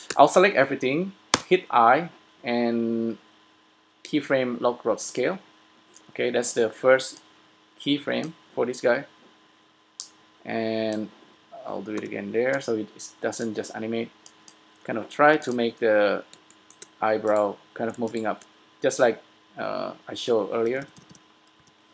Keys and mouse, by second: 0.3 a, 1.5 i, 12.1 i, 15.5 s, 16.9 click, 20.9 l, 21.2 l, 21.8 l.